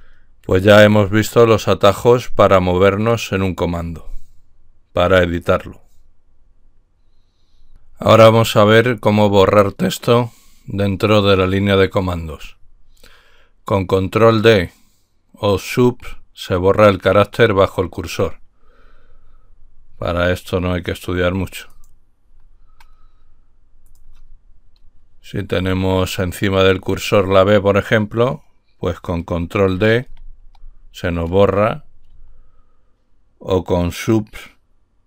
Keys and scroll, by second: 25.6 Left, 30.0 ctrl+d, 32.0-35.0 Left.